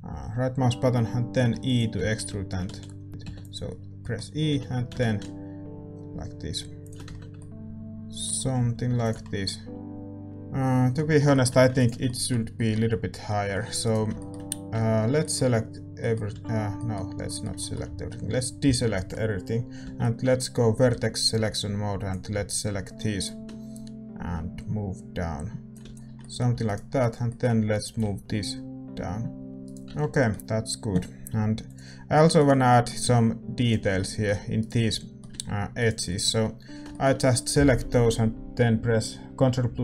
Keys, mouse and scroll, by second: 1.5 r, 1.9 z, 2.6 z, 3.1 middle click, 3.2 e, 3.9-6.7 middle drag, 4.5 g, 7.0 Tab, 7.1-10.3 middle drag, 7.6 Tab, 8.4 a, 8.5 a, 9.2 ctrl+s, 10.3 KP_5, 12.0 ctrl+s, 13.8-15.2 right drag, 14.7 Tab, 15.2 middle click, 16.3 a, 19.8 z, 22.0 b, 23.2-25.8 drag, 25.8 z, 25.9 click, 26.1-29.1 middle drag, 26.5 a, 26.9-29.1 right drag, 27.9-29.5 drag, 29.5 ctrl+s, 29.5-32.3 middle drag, 29.5 a, 29.6-31.0 right drag, 29.8 Tab, 31.0-33.5 drag, 32.3-39.8 right drag, 32.6-39.8 middle drag.